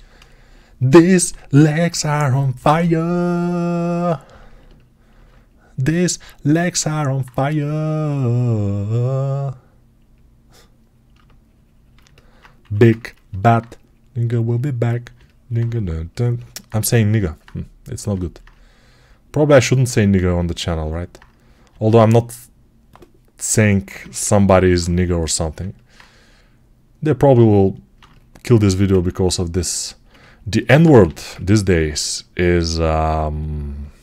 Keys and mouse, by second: 2.4 g, 5.1-11.8 right drag, 12.5 3, 16.1-25.8 alt+drag, 23.7 g, 30.9 g.